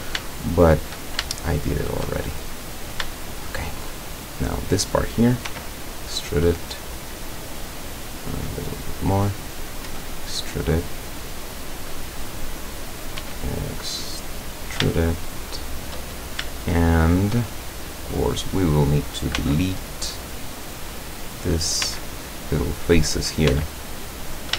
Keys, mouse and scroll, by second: 0.4 shift+middle click, 0.9 shift+middle click, 1.4-2.1 shift+middle drag, 2.5-2.9 shift+scroll up 1, 3.2-4.0 shift+middle drag, 4.5 right click, 5.5 e, 6.7 click, 8.3 click, 9.5 right click, 9.9 e, 12.0 click, 13.0 right click, 13.2 e, 14.5 click, 15.0-16.0 shift+middle drag, 16.6-17.5 shift+middle drag, 17.6-18.0 shift+scroll up 1, 18.5 right click, 19.4 x, 20.1 click, 21.5 right click, 21.9 x, 22.3 click, 23.3 right click, 23.5 x, 23.7 click.